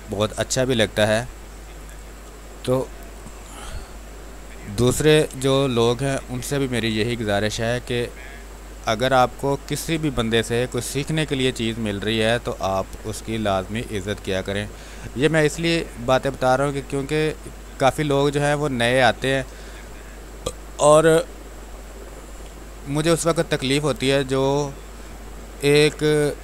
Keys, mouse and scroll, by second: 1.8 space, 1.9 click, 3.5 r, 3.7 click, 4.9-7.2 typing, 5.4 click, 6.5 click, 7.8-11.7 drag, 11.9 click, 13.2 space, 13.8 x, 14.2 click, 15.4 click, 16.1 x, 16.8 click, 17.8 x, 18.1 click, 19.3 x, 21.6 click, 22.4 space, 22.6 click, 22.9 space, 23.2 x, 23.6-25.0 drag, 25.0 space, 25.2 click, 25.5 space, 26.0 click, 26.1-26.4 drag.